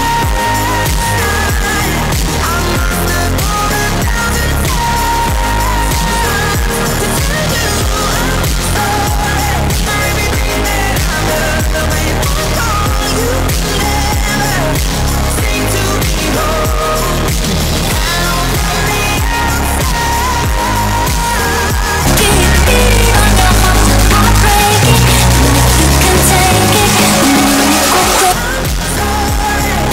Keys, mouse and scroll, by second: 28.2 Page_Down.